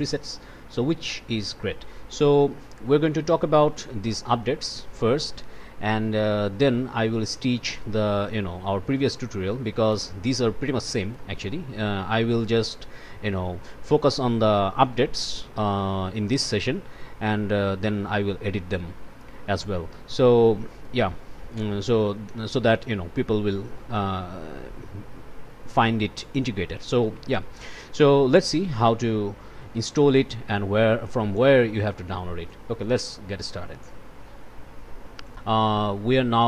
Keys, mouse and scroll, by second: 0.2 click, 0.9 click, 1.8 click, 2.1 click, 2.8 o, 3.1 click, 3.4 click, 5.4 click, 5.9 click, 6.9 click, 7.9 click, 8.6 click, 8.9 scroll up 4, 9.2 scroll down 2, 9.2-10.0 scroll up 8, 10.1 m, 10.5 scroll up 2, 10.9 click, 11.3 click, 11.7 click, 12.4 click, 13.3 click, 13.5 click, 14.0 click, 14.3-15.6 drag, 16.0 click, 16.4 right click, 16.7 click, 16.9 click, 17.2 click, 17.8 click, 18.2 click, 18.5 click, 18.7-19.9 drag, 20.4 click, 21.0 click, 21.5 click, 22.0 click, 23.8 click, 25.9 click, 26.0 click, 26.5 click, 26.9 click, 27.7 click, 27.9 9, 28.0 Return, 28.4 click, 29.1 click, 29.4 click, 30.0 click, 30.3 click, 31.1 click, 32.1 click, 32.8-34.2 drag, 34.9 click, 35.1-36.3 drag, 36.3 scroll down 1.